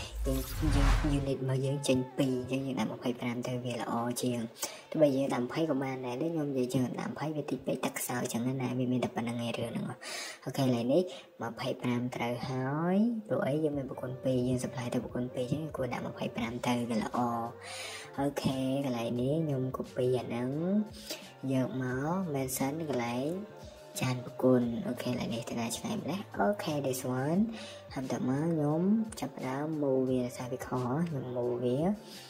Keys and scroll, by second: 1.3 Escape, 2.3-3.0 typing, 6.0 Escape, 6.1 Escape, 9.0 Escape, 14.2 Escape, 15.4 Escape, 18.1-18.7 typing, 26.4 Escape, 26.8 Escape, 30.8 typing.